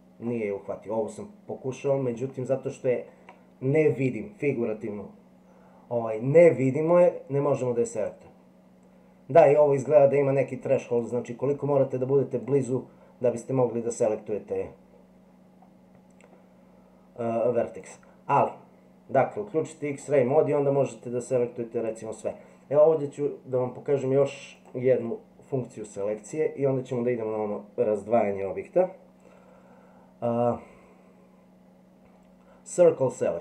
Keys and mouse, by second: 2.0-3.3 middle drag, 8.0 click, 11.0 click, 12.5 click, 17.9 click, 26.2-33.4 drag.